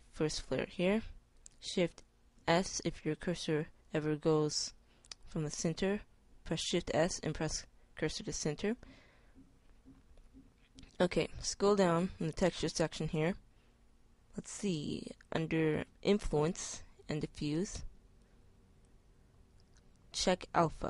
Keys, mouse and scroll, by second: 2.1 shift+s, 12.9-18.6 middle drag, 20.4 middle click.